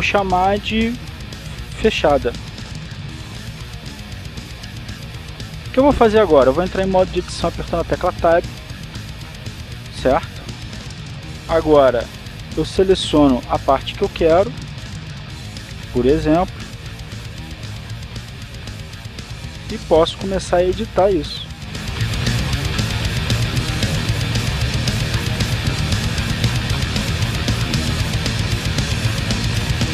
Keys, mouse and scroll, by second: 1.1 click, 3.0-5.0 typing, 6.0 Return, 9.5 Tab, 13.9 b, 14.2 click, 16.3-20.1 drag, 20.3 right click, 21.6 g, 23.4 click, 24.1 right click, 24.4 g, 24.8 click, 25.6 right click, 26.1 g, 28.1 click, 28.9 right click, 29.1 g.